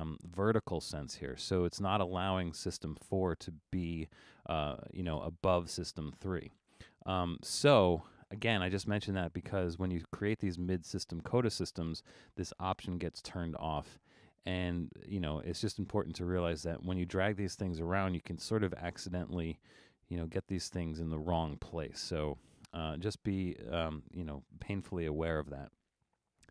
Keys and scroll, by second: 6.7 super+z, 21.9 super+z, 22.4 super+z.